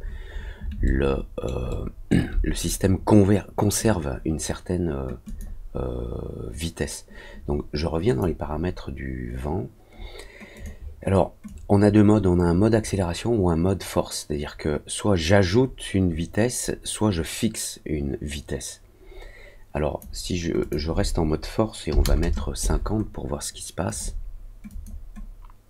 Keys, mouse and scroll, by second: 0.2 scroll down 1, 0.8 alt+scroll up 1, 0.9 alt+middle click, 1.6 alt+middle click, 5.2 click, 8.0 click, 10.5 click, 11.4-19.9 drag, 20.6 click, 23.8 click, 24.6 click.